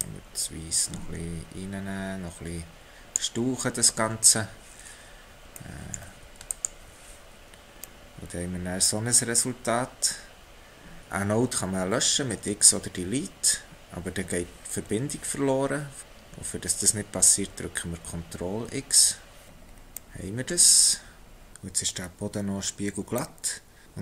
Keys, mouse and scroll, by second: 5.5 typing, 6.7 ctrl+shift+click, 7.9 middle click, 19.7 ctrl+x, 21.5 middle click.